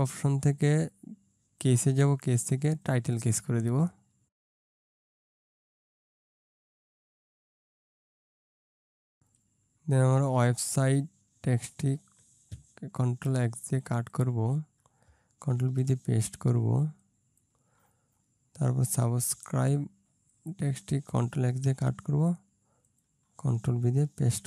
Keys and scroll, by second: 7.5 ctrl+space, 8.1 ctrl+space, 13.1 ctrl+x, 15.6 ctrl+v, 21.7 ctrl+x, 24.1 ctrl+v.